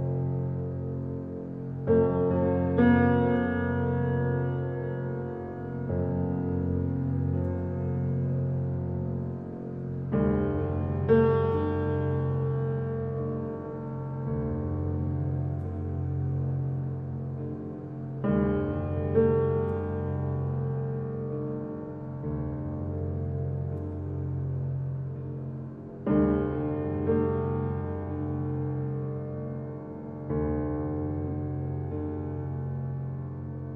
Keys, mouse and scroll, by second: 3.6-6.7 middle drag, 6.9 ctrl+z, 7.8 i, 10.3 ctrl+r, 14.7 ctrl+r, 17.9-19.9 middle drag, 19.9 Tab, 20.3-22.0 middle drag, 22.0-22.8 drag, 23.0 right click, 24.0-25.6 middle drag, 25.6-26.0 scroll down 2, 26.0-27.3 shift+middle drag, 27.3 Tab, 27.9 click, 28.4-30.0 middle drag, 30.0 click, 30.9 middle click, 31.5 shift+click, 32.7 i.